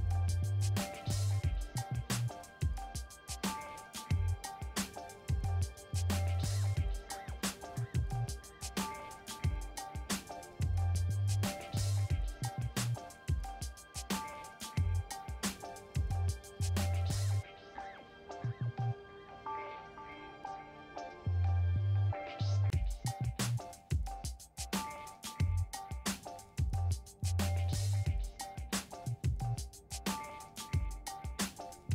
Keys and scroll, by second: 3.0 5, 3.8 Return.